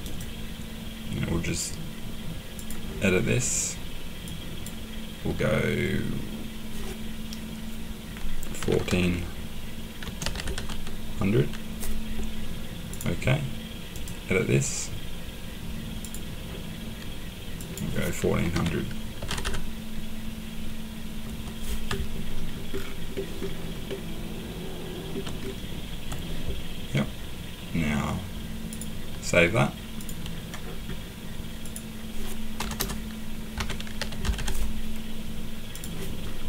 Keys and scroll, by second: 8.6 typing, 10.0-10.7 typing, 13.7-14.5 typing, 18.5-19.8 typing, 21.2 Return, 25.4 Return, 32.6-34.7 typing.